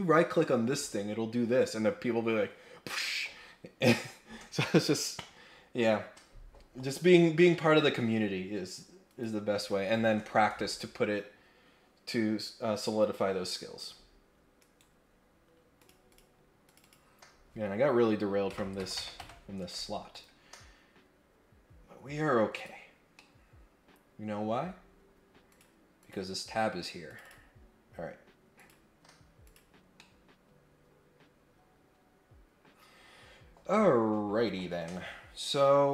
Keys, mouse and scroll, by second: 9.0 click, 14.6 right click, 15.7 click, 16.1 click, 16.6 click, 20.1 Escape, 20.4 scroll down 2, 21.9 scroll down 2, 22.5 click, 23.1 middle click, 24.2-24.5 scroll down 2, 24.5 scroll up 1, 25.4 click, 25.9 click, 27.0 click, 27.2 click, 28.5 click, 29.4 click, 29.8 scroll down 1, 29.9-32.6 middle drag, 32.9-33.3 scroll down 2, 34.1 scroll up 1.